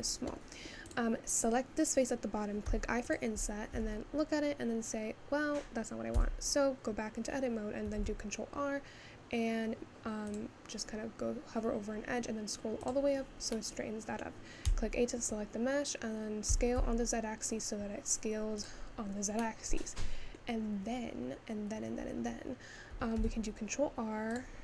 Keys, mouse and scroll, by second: 0.9 click, 2.7 i, 3.7 Tab, 6.2 Tab, 7.9 ctrl+r, 13.6-14.7 middle drag, 14.7 a, 19.5-20.6 middle drag, 20.6-23.1 scroll down 1, 23.1 ctrl+r.